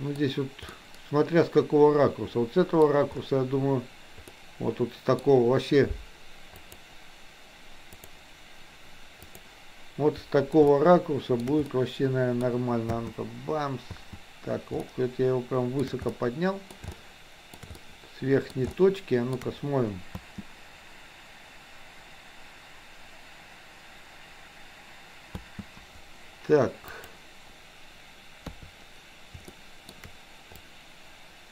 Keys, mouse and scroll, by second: 0.6-2.9 middle drag, 4.3-5.1 middle drag, 10.8-11.4 shift+middle drag, 11.8-12.5 middle drag, 12.9 space, 14.9-15.9 shift+middle drag, 16.1-16.6 middle drag, 16.9-17.6 shift+middle drag, 17.8 middle click, 18.6 shift+middle click, 20.1 space, 25.4 space, 26.9 click, 28.5 KP_3, 29.5-29.9 shift+middle drag, 30.5-31.5 drag.